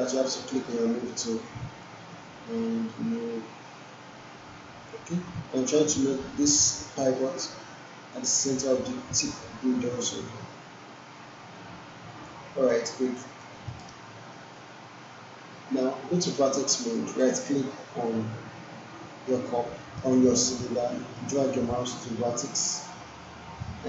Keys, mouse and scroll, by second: 0.2-4.9 drag, 8.1-12.5 drag, 12.7 alt+middle click, 13.1 alt+right click, 13.9-14.5 alt+middle drag, 17.2-22.5 right drag.